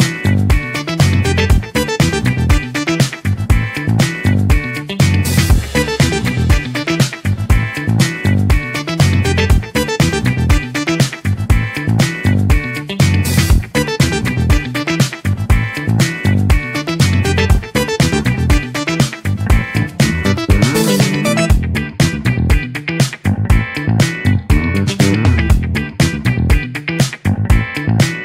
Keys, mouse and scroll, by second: 10.5 scroll up 2, 21.7-22.4 drag, 22.4-23.0 scroll up 1, 23.0-26.8 middle drag, 26.8-28.2 drag.